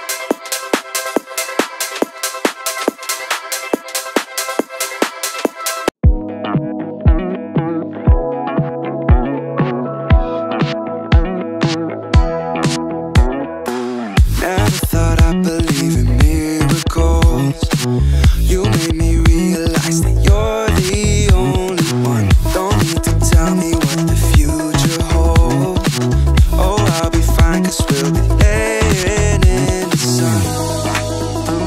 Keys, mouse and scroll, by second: 4.6-5.2 drag, 5.7 middle click, 6.4 scroll up 2, 6.8 shift+middle click, 7.2 scroll up 1, 8.0 scroll up 1, 8.5 middle click, 10.0 click, 11.3 click, 12.6 Tab, 14.4 click, 15.2 click, 16.0 click, 22.7 click, 23.1 click, 23.6 click, 26.1-26.6 drag, 27.7 click, 30.1 click, 30.9-31.4 drag.